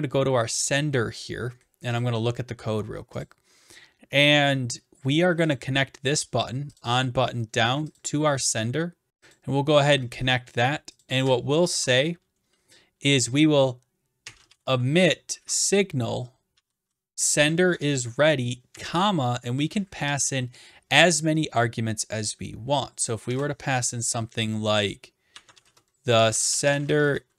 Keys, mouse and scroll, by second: 2.0-3.2 drag, 5.5 click, 6.8 click, 7.0 click, 8.0 click, 9.3 click, 11.0 click, 11.8 Return, 14.0-15.1 typing, 15.4 Tab, 16.3-17.0 typing, 17.6 Down, 17.8 Return, 23.3 typing, 25.1-27.3 typing.